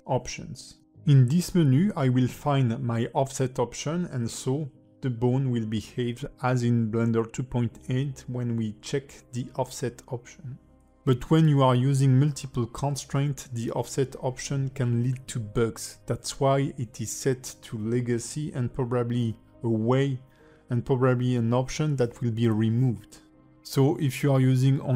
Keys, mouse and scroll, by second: 0.8 click, 1.3 r, 2.4 click, 2.8 r, 3.8 click, 4.2 alt+r, 5.1 click, 5.6 alt+middle click, 14.7 click, 21.6 click, 22.1 r, 24.0 r.